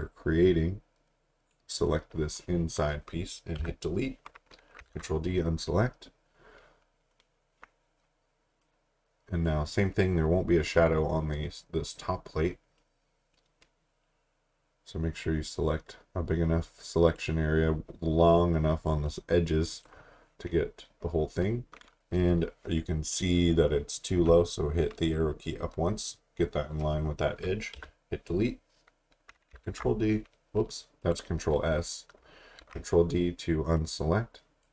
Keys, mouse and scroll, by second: 3.6 Delete, 4.9 d, 8.6 click, 12.8 click, 24.2 Up, 27.7 Delete, 29.6 ctrl+s, 31.0 click, 32.6 ctrl+d, 33.8 click.